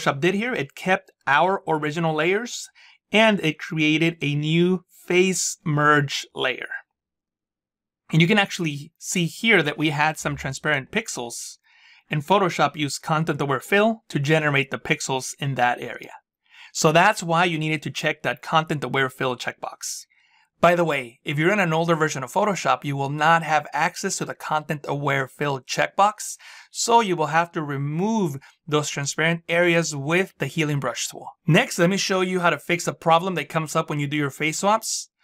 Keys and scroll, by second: 10.1 z.